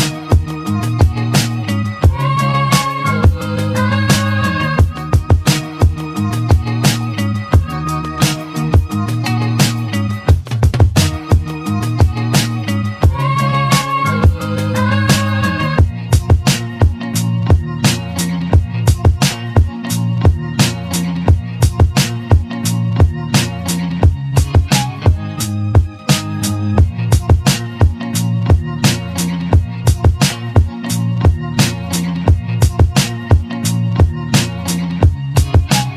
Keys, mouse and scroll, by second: 0.9-3.4 middle drag, 10.1 g, 14.6-17.1 middle drag, 18.1 `, 22.2-23.1 drag, 23.1-25.6 middle drag, 25.9-27.3 drag, 27.3-28.7 right drag, 28.7-29.8 middle drag, 29.8 Tab, 30.2 Tab, 30.5 Tab, 33.6 shift+d.